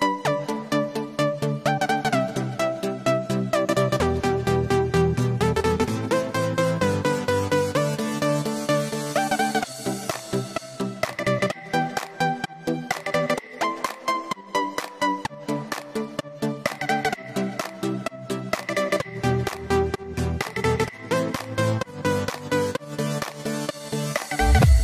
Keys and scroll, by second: 6.5 super+g, 7.9 super+g, 14.8 super+t.